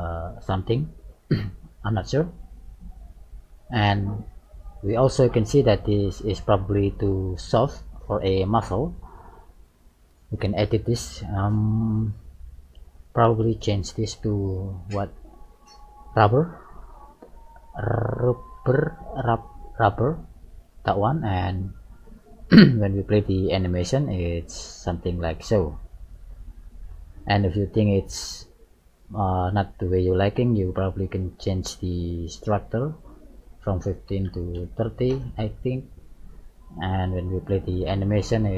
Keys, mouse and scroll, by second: 2.4 click, 3.0 click, 3.6 click, 7.1 g, 9.5 middle click, 10.6 middle click, 13.4 click, 14.5 click, 17.2 middle click, 19.3 middle click, 22.1 click, 23.1 click, 26.2 click, 27.5 click, 28.1 click, 29.3 middle click, 35.1 click, 37.5 click.